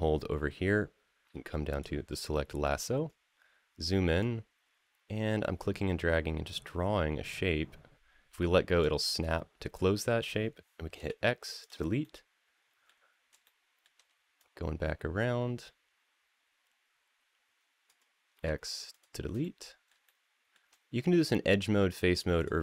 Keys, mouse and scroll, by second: 2.5-4.0 scroll up 3, 4.0-8.6 drag, 10.8 x, 11.8-12.6 middle drag, 13.2 shift+middle click, 14.1-17.7 drag, 18.1 x, 19.2-19.7 middle drag, 19.8 shift+middle click, 22.2 click.